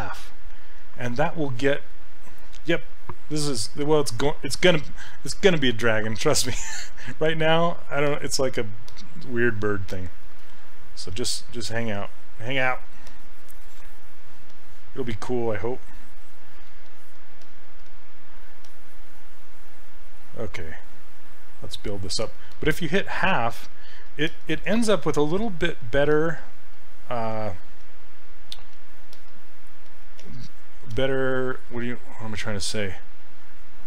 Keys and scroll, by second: 11.1 s, 17.9 s.